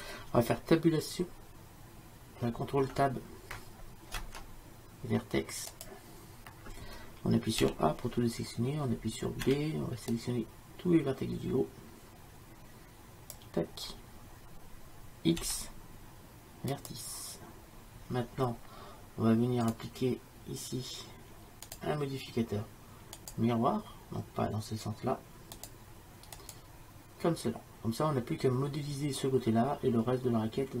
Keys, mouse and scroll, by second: 4.2 ctrl+Tab, 7.7 a, 9.5 b, 15.5 x, 18.9 x, 19.7-30.8 drag.